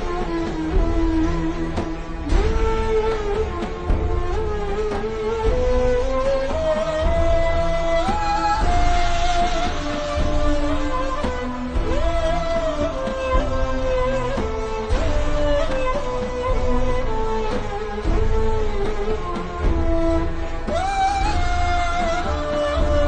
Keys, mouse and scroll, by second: 1.7 click, 5.1 click, 8.6 v, 9.0 click, 15.4 alt+s, 15.7-16.5 typing, 18.1 v, 18.3 click, 19.5 shift+click, 20.1 click, 20.6 alt+shift+scroll up 1, 21.3-21.9 alt+shift+scroll up 3, 22.0 click.